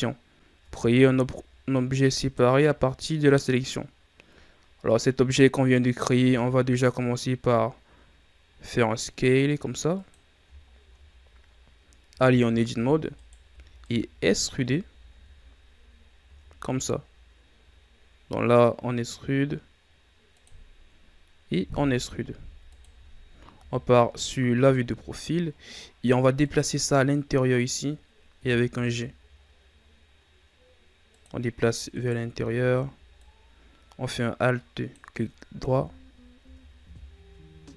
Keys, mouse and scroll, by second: 0.5 Tab, 2.1 right click, 10.6 scroll down 3, 11.1 scroll up 2, 12.0 Tab, 13.1 alt+right click, 13.7-15.0 middle drag, 15.0 KP_1, 16.1 e, 21.4 e, 23.5 KP_3, 25.0-26.0 scroll up 1, 26.0-26.3 scroll up 1, 26.3-28.3 drag, 28.3 g, 31.8 alt+right click, 33.1-35.6 drag, 35.6 KP_1, 36.3 Tab, 36.8 a, 37.0-37.7 scroll down 5.